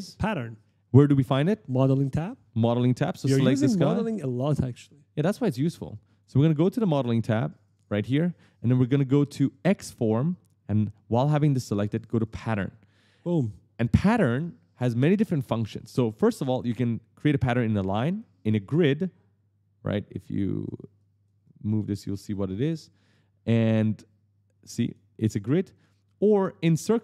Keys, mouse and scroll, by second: 4.8 click, 6.6 click, 7.4 click, 9.3 click, 12.0 click, 17.1 click, 17.9 click, 19.9 click, 20.8 click, 21.2 click, 23.8 click, 25.5 click, 26.6 click.